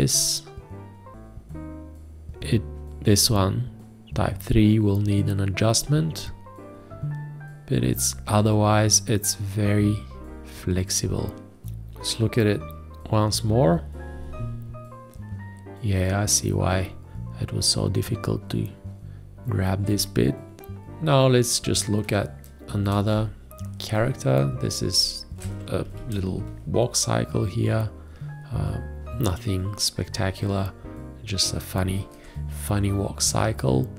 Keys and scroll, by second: 23.1 ctrl+space, 24.7 ctrl+space, 25.8 ctrl+a, 32.2 ctrl+space, 33.5 ctrl+space.